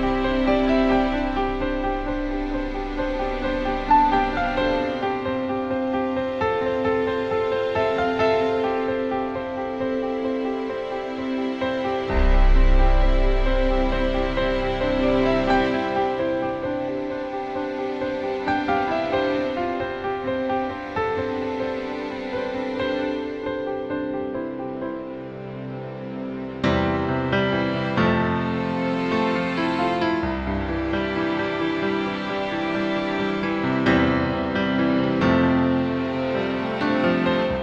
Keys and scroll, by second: 1.9 BackSpace, 2.3 BackSpace, 7.6 BackSpace, 13.8-14.4 typing, 28.4 BackSpace, 29.5 BackSpace, 30.1 BackSpace, 30.9 BackSpace, 34.6-37.5 typing.